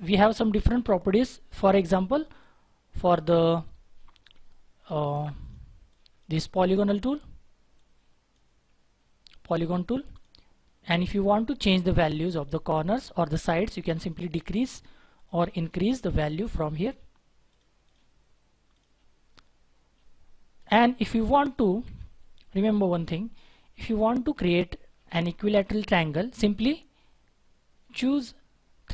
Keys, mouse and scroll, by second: 2.4 shift+click, 5.9 double click, 14.0 double click, 21.7 Delete.